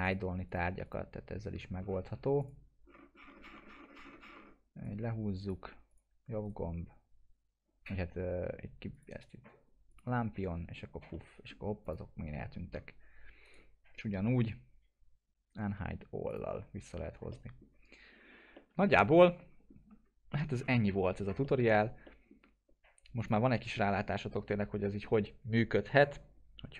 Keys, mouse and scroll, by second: 1.8 scroll up 1, 2.4 click, 2.8 scroll down 1, 4.8-5.8 click, 6.4 right click, 8.9 right click, 10.8 click, 11.1-11.7 middle click, 11.5 scroll down 1, 11.8 click, 12.4-13.0 scroll up 1, 13.0-13.4 scroll down 1, 13.4 right click, 16.3 click, 17.3 middle click, 17.6 scroll down 1, 18.5 middle click, 19.1-19.7 alt+middle click, 20.4-20.8 scroll up 1, 20.8 middle click, 21.4-22.3 alt+middle click, 22.6-23.2 scroll up 2, 23.2 click, 23.5 middle click, 24.8-25.1 middle drag.